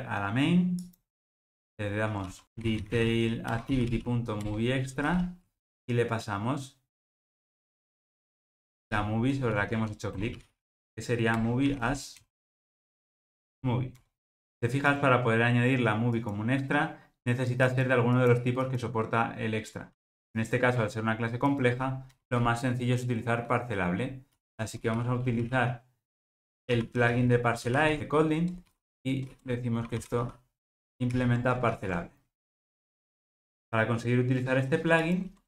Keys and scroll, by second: 3.6 Return, 11.4 Return, 20.4 super+b, 28.0 Escape, 31.1 alt+super+l.